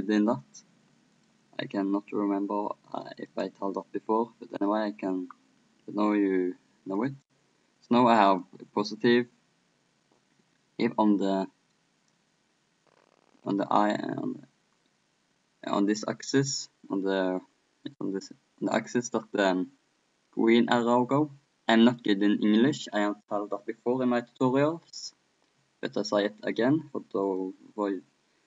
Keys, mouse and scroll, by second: 1.2-2.8 drag, 3.0 click, 5.1-7.0 middle drag, 7.0-10.0 drag, 10.6-27.3 middle drag, 27.3-28.4 drag.